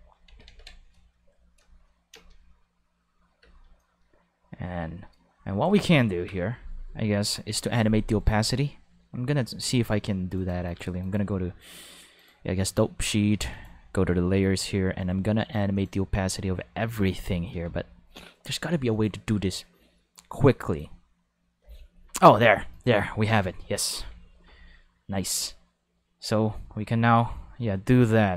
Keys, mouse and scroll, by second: 0.3 ctrl+s, 0.4 ctrl+5, 2.1 space, 2.2 5, 3.4 ctrl+space, 3.5 5, 3.8-5.3 drag, 10.3 click, 11.0 click, 13.5 click, 15.7 click, 18.9 click, 20.6 click, 22.7 click, 25.3-28.3 drag.